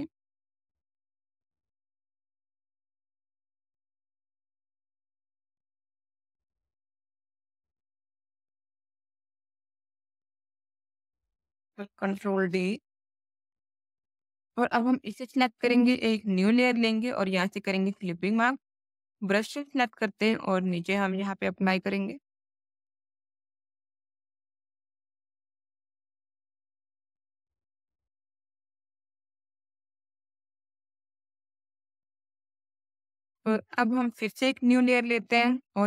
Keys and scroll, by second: 12.0 ctrl+d, 13.4 space, 18.9 b, 26.4 ctrl+z.